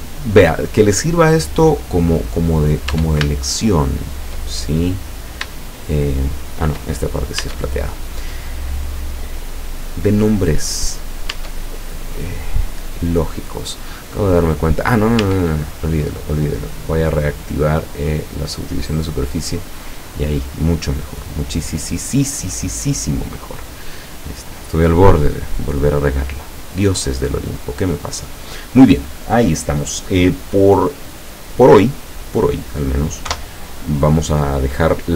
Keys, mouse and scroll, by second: 0.9-1.8 middle drag, 2.3 right click, 3.0 Tab, 3.4 shift+click, 4.2 shift+middle click, 4.9-5.4 scroll up 1, 5.9-7.0 shift+middle drag, 7.1 shift+scroll up 1, 7.4 Tab, 8.0-8.3 scroll down 2, 8.5-9.7 middle drag, 11.4 Tab, 11.8-12.3 scroll up 2, 12.6 scroll down 2, 15.2 Tab, 16.8 click, 18.1 click, 19.2-19.6 scroll down 1, 19.9-20.4 scroll up 1, 21.7 click, 22.5-22.9 scroll down 1, 23.2-24.3 middle drag, 24.4-25.1 scroll up 1, 25.2 scroll down 1, 27.5 scroll down 2, 33.3 F12.